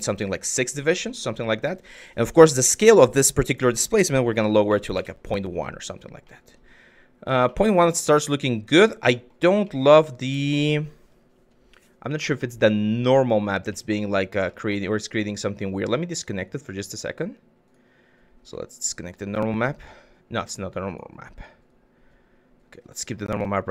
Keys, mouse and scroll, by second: 0.4-0.8 drag, 2.1-4.7 drag, 6.0 click, 7.2 click, 7.8 click, 8.7 click, 9.3-10.4 drag, 11.8 click, 13.4 shift+click, 14.1 click, 16.1-17.3 drag, 18.3-18.9 drag, 20.3 click, 21.3 click, 21.4-22.8 middle drag, 23.5 click.